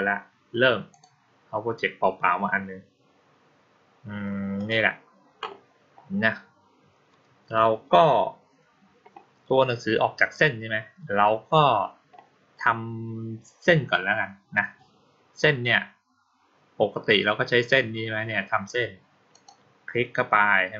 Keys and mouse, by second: 4.4 click, 19.2 click.